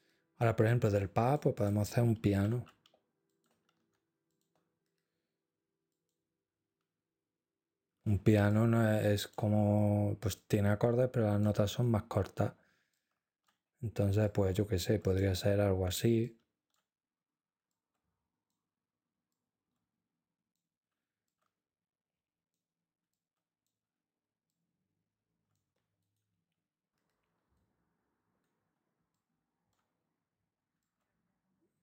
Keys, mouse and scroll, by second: 0.8-2.4 drag, 3.3 ctrl+click, 4.3 click, 5.9-6.9 drag, 8.5 ctrl+scroll, 8.8 ctrl+click, 10.4 click, 11.7 right click, 12.9-14.0 ctrl+drag, 14.3 shift+click, 16.2-17.2 ctrl+drag, 17.7 shift+click, 19.3-20.3 shift+drag, 21.3-22.3 shift+drag, 23.1-24.2 shift+drag, 24.5-25.5 shift+scroll, 26.0 click, 27.6 right click, 29.2 ctrl+scroll, 30.8-31.8 scroll up 2.